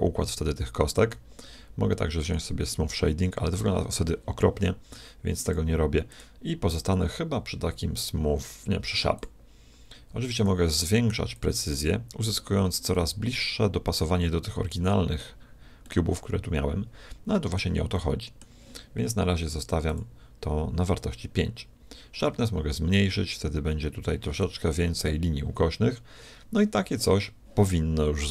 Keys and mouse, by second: 2.2-4.2 drag, 5.5-7.9 drag, 10.3-12.3 drag, 13.1-14.9 middle drag, 15.9-17.9 middle drag, 17.9-19.7 middle drag, 19.5-21.7 drag, 22.2-23.9 drag.